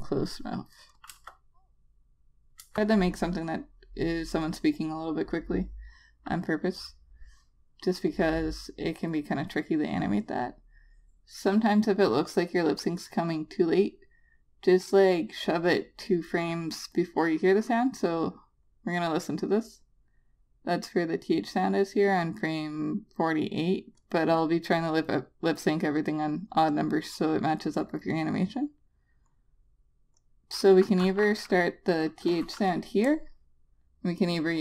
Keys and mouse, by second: 1.5 Return, 3.0 Return, 3.8 click, 17.3 click, 19.8 click.